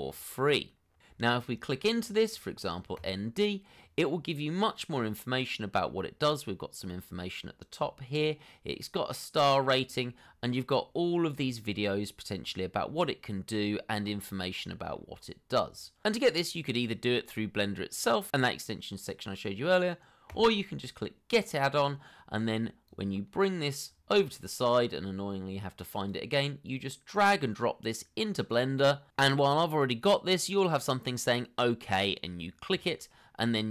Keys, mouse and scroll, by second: 1.0 scroll down 1, 2.0 scroll up 1, 4.4 scroll down 1, 5.7 scroll up 1, 7.7 scroll down 1, 13.3 scroll down 1, 14.5 scroll up 1, 16.2 scroll down 1.